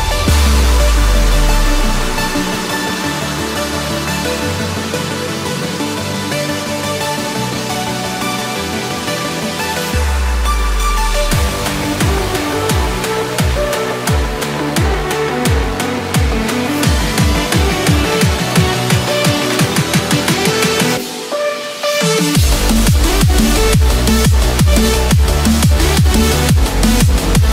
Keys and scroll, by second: 2.5 ctrl+-, 4.5 ctrl+=, 5.4 ctrl+-, 5.8 ctrl+=, 6.2 ctrl+=, 26.6 ctrl+-, 27.0 ctrl+-.